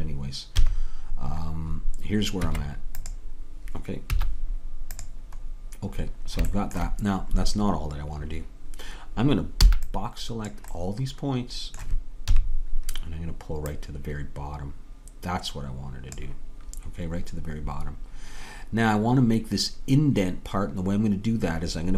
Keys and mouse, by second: 0.6 KP_3, 2.5 Tab, 4.1 z, 9.7 b, 12.3 KP_3, 13.8-15.6 drag.